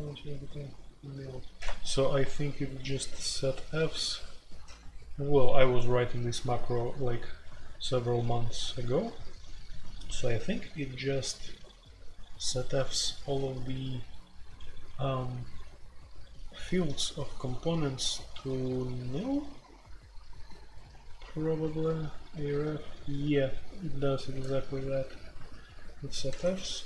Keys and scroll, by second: 0.0-0.2 typing, 2.7-3.7 typing, 4.9-5.7 typing, 19.4-19.9 k, 23.5-24.4 k, 24.4-26.8 j.